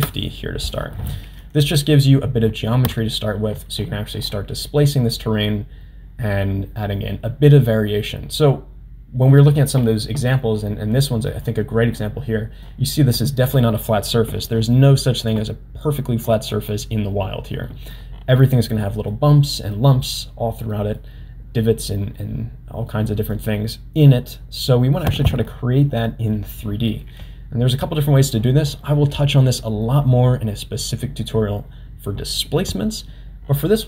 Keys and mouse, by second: 2.7 Tab, 11.3 middle click, 12.8 middle click, 18.0 middle click, 18.8 middle click, 19.8 middle click, 20.7 middle click, 21.8 middle click, 22.9 middle click, 24.1 middle click.